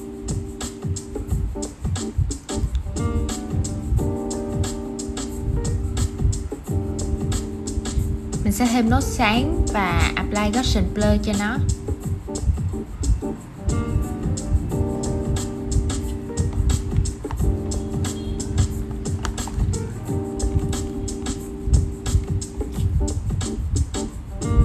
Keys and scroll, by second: 9.1 super+z, 21.9 super+z, 24.3 super+x.